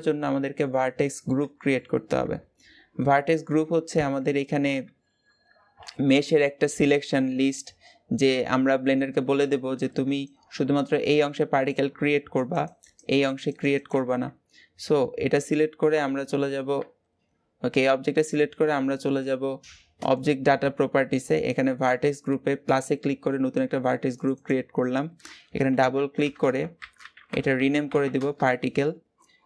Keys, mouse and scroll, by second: 1.3 scroll up 1, 3.7 Tab, 4.6 a, 5.4 alt+a, 16.6 Tab, 22.6-24.0 drag, 24.1-28.0 drag, 28.0 BackSpace.